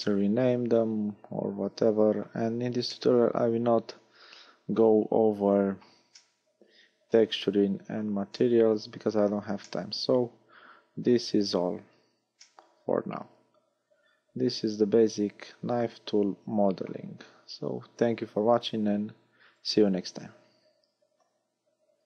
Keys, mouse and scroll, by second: 0.1 middle click, 3.0 middle click, 6.2 middle click, 8.4 middle click, 9.7 middle click, 12.0-12.5 scroll down 1, 12.5 middle click, 12.5 scroll down 1.